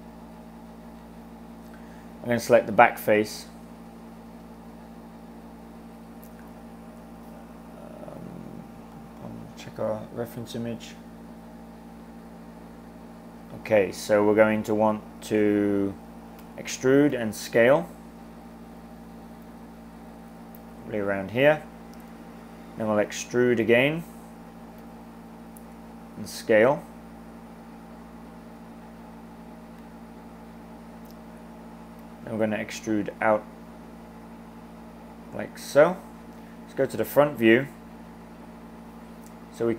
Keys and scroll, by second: 16.4-17.0 typing, 22.2 e, 25.0 s, 32.0 e.